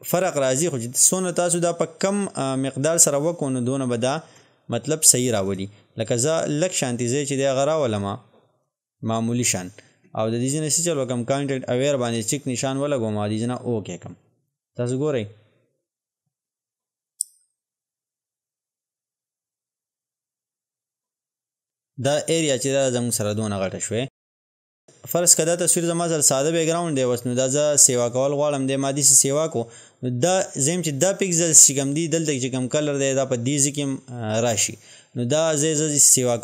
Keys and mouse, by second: 4.3 ctrl+z, 5.5-13.4 drag, 24.8 click, 27.9-36.4 drag.